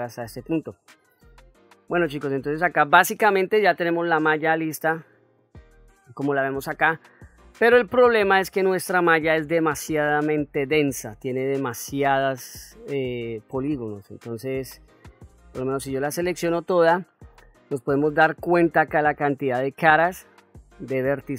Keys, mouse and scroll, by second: 0.8-1.6 ctrl+middle drag, 1.9-2.5 middle drag, 5.8 Tab, 6.2 click, 6.7 middle click, 8.3-9.8 ctrl+middle drag, 10.3 middle click.